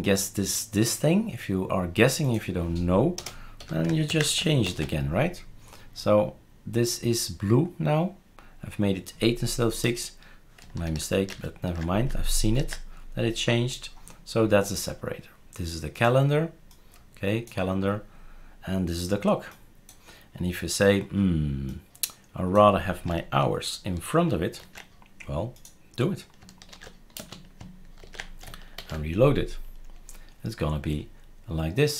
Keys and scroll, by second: 3.2 BackSpace, 3.6 8, 4.1 ctrl+s, 4.7 shift+super+r, 10.9 ctrl+z, 11.3 ctrl+z, 12.5 ctrl+s, 24.6 ctrl+x, 26.7 ctrl+v, 27.2 space, 28.0 ctrl+s, 28.8 shift+super+r.